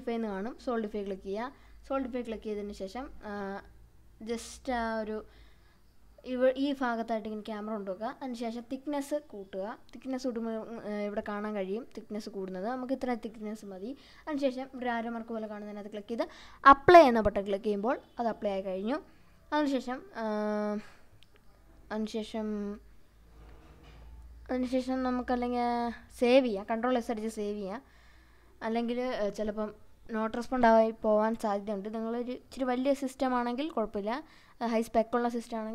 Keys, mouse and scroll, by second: 2.3-5.0 middle drag, 5.1-6.3 scroll up 4, 6.4 scroll up 1, 7.4-9.0 scroll up 1, 9.6-9.9 drag, 11.5 scroll down 1, 11.8-13.0 middle drag, 15.5-16.7 drag, 18.1-23.1 drag, 25.3 ctrl+s.